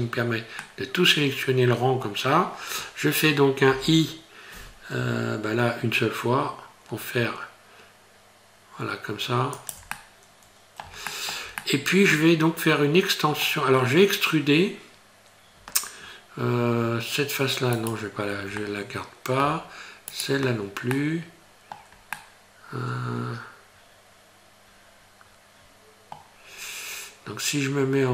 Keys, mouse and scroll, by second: 0.6 middle click, 2.3-2.7 scroll down 2, 9.9 middle click, 11.0 shift+middle click, 11.6 middle click, 13.7 scroll down 1, 13.8 scroll up 2, 14.5-15.6 scroll up 2, 17.8 shift+right click, 18.6 middle click, 20.1 shift+right click, 20.5 scroll down 2, 20.9 middle click, 22.2 middle click, 26.5-27.8 scroll up 1, 27.8 scroll down 2.